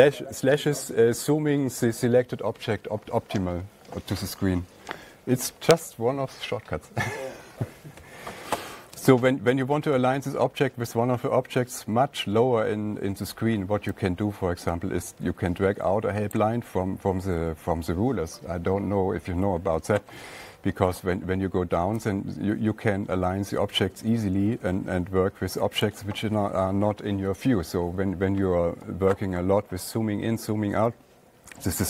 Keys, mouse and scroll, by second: 16.7-20.8 drag, 20.8 scroll down 1, 20.9 scroll down 1, 21.0 scroll down 1, 26.3 click, 27.4 click, 31.2 scroll.